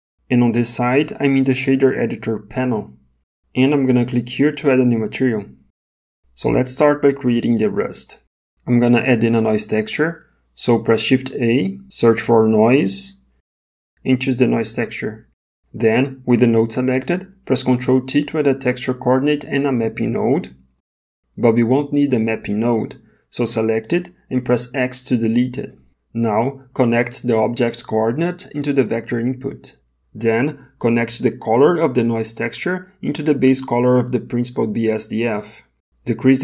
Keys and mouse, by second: 5.6 click, 10.9 shift+a, 18.5 ctrl+t, 24.7 x, 27.3 click, 27.8-29.0 drag, 31.2 click, 31.5-32.8 drag.